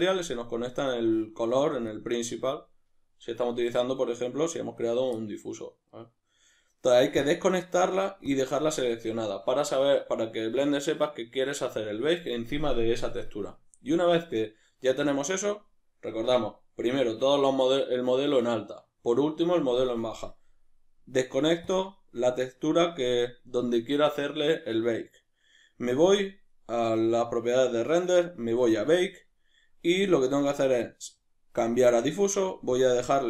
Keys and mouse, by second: 0.6 click, 1.9 click, 7.2-26.2 drag, 27.3-32.5 middle drag, 32.5 click, 32.8 click.